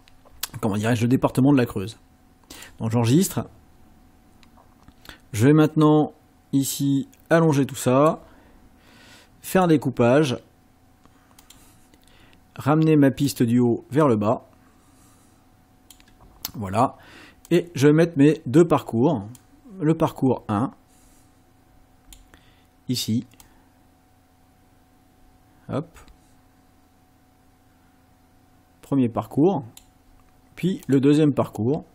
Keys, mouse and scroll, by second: 2.6 click, 5.7-8.3 drag, 9.5 click, 11.4 click, 13.3 click, 14.1-16.1 drag, 17.5 click, 19.4-22.3 drag, 23.4-30.0 drag, 30.9 click, 31.6-31.9 drag.